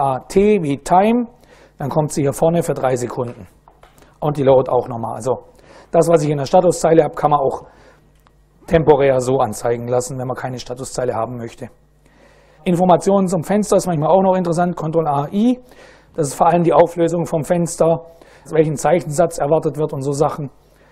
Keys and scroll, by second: 0.0 t, 12.6 super+Right, 14.3 ctrl+a, 15.0 i.